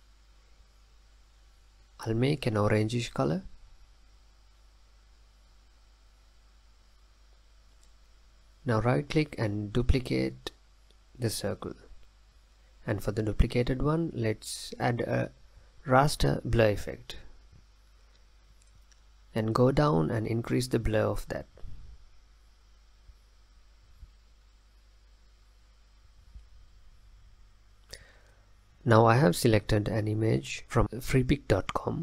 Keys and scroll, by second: 31.6 super+Left, 31.6 super+Down.